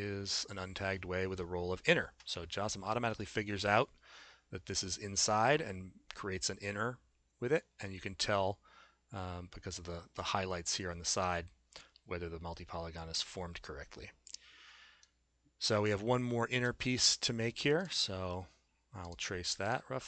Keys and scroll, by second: 16.6 a.